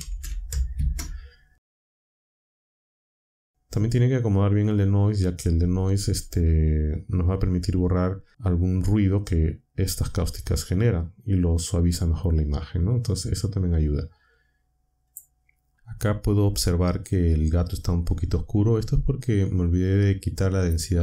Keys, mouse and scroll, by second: 0.0-0.6 typing, 0.7 Return, 1.9 click, 2.5 click, 15.0 click.